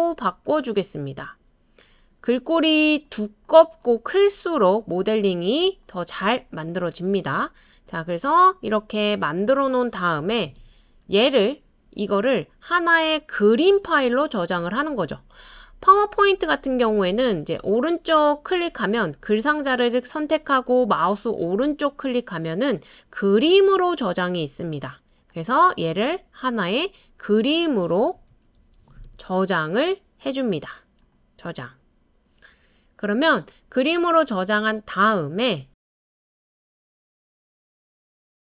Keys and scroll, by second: 10.3 BackSpace, 27.8-29.3 typing, 37.6-38.3 typing.